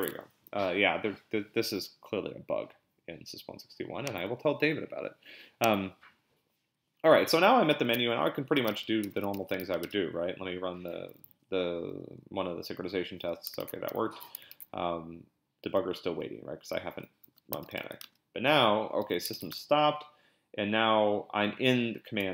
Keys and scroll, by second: 8.4-9.6 typing, 9.8 Return, 13.6 ctrl+b, 13.9 p, 14.5 ctrl+b, 16.2-18.2 typing, 19.3 ctrl+b, 19.5 p, 22.2 l.